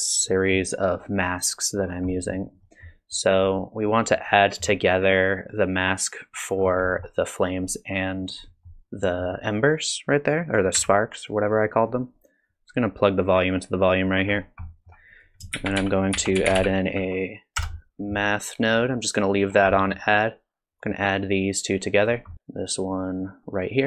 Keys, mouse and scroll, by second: 0.3 middle click, 1.0 click, 1.8-2.3 scroll down 4, 2.1 middle click, 2.6 middle click, 4.1 middle click, 6.6-7.2 scroll down 3, 6.9 middle click, 8.5 middle click, 9.1 middle click, 9.9 click, 10.7 g, 11.7 click, 12.5 click, 14.3-14.8 scroll up 5, 14.7 middle click, 14.9 scroll down 1, 15.1 click, 15.5 shift+a, 19.5-20.8 scroll down 3, 19.7 middle click, 20.8 click, 22.3 middle click, 22.3-23.0 scroll down 1, 23.0 click.